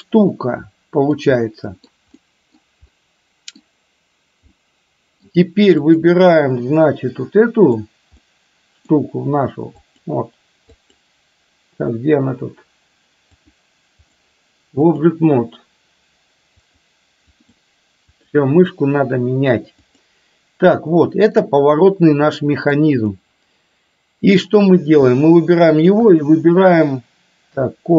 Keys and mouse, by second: 1.5-2.0 middle drag, 2.2-2.7 middle drag, 3.1-3.6 middle drag, 4.6-5.3 middle drag, 5.8 click, 6.8-8.0 middle drag, 8.2-9.1 middle drag, 10.1 click, 10.8 click, 13.3-14.2 drag, 16.7 click, 17.5-18.5 drag, 20.0 click, 21.1-21.5 middle drag, 22.5 middle drag, 23.2-24.6 middle drag, 25.8 shift+click.